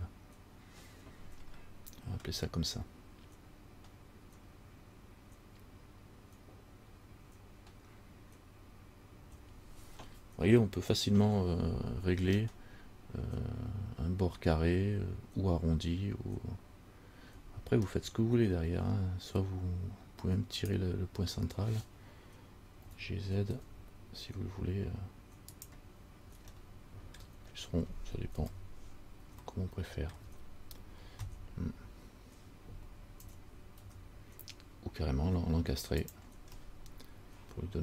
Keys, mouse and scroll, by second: 1.7 scroll down 1, 12.0-15.6 scroll up 4, 15.6 scroll up 1, 18.0 scroll up 1, 18.1 middle click, 20.8 right click, 23.0 g, 26.7 shift+middle click, 27.4-28.6 shift+scroll down 2, 28.6-29.6 scroll down 1, 28.6 KP_1, 30.3 shift+middle click, 30.3-31.8 shift+scroll down 1, 33.4 g, 36.8 middle click.